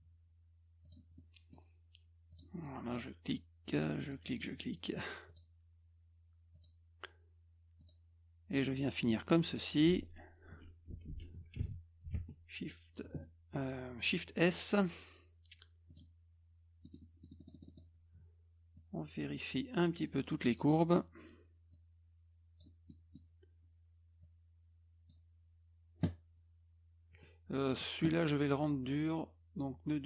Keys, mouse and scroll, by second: 0.9 click, 1.2 middle click, 2.3 click, 2.6 middle click, 3.7 click, 4.1 middle click, 5.3 click, 6.6 click, 7.8 click, 8.5 click, 9.1 middle click, 9.7 F1, 10.9 F2, 11.6 ctrl+a, 12.1 shift+s, 15.9 click, 16.9 middle click, 17.2 middle click, 17.4 middle click, 17.5 middle click, 17.5 scroll up 2, 17.7 middle click, 18.8-20.0 drag, 21.7 click, 22.9 middle click, 24.2-25.1 drag, 27.2-27.7 drag.